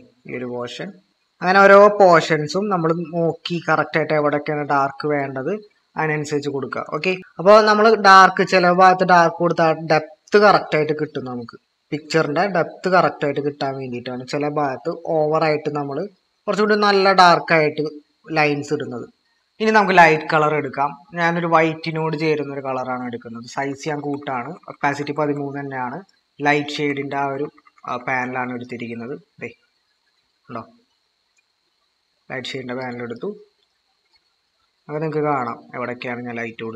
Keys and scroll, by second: 7.1 typing, 8.4 typing, 23.7-25.3 typing, 26.7-28.2 typing.